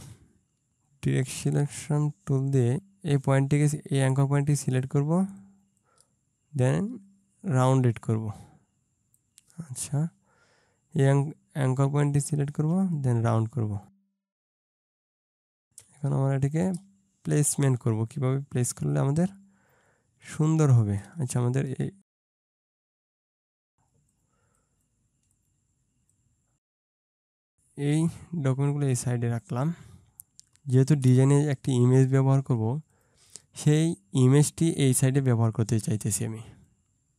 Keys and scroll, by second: 20.2 ctrl+space, 30.5 ctrl+space.